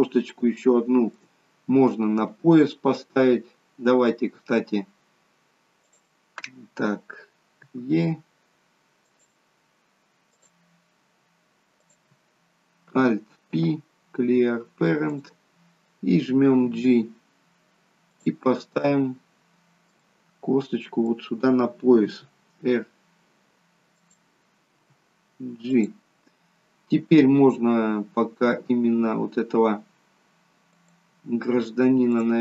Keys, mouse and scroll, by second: 0.0 scroll up 3, 0.4 shift+middle click, 3.4-4.3 scroll down 3, 5.8 click, 7.6 e, 10.2 click, 11.8 click, 13.4 alt+p, 16.6 g, 18.6 middle click, 20.3 middle click, 22.0 r, 24.7 g, 30.7 click, 32.1 click.